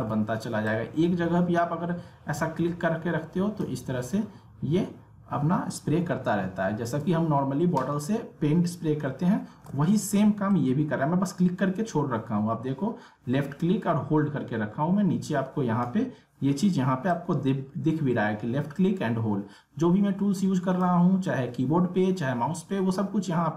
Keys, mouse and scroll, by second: 0.0 ctrl+z, 0.7-6.0 drag, 6.1 ctrl+Num_Lock, 6.1-9.7 ctrl+drag, 9.7 ctrl+z, 10.5-23.0 drag.